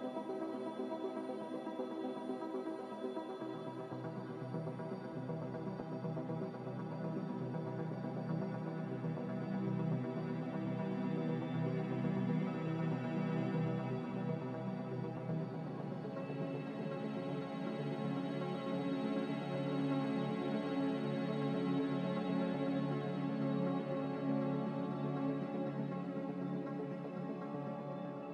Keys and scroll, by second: 12.0 ctrl+k, 18.1-19.1 typing, 22.6 ctrl+k.